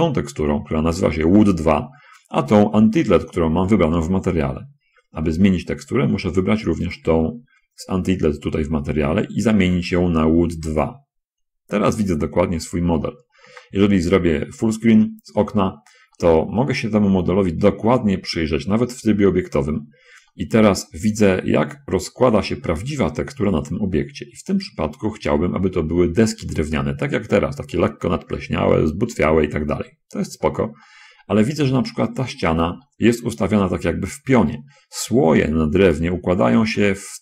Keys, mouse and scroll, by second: 7.3 click, 11.1 click, 13.5 shift+space, 16.4-17.9 middle drag, 18.0 Tab, 20.7-22.2 middle drag, 22.5-24.9 middle drag, 25.2 middle click, 31.2-32.3 middle drag, 32.4 middle click, 32.9 shift+middle click, 34.5 d, 35.2 d, 35.4 click, 36.9 click.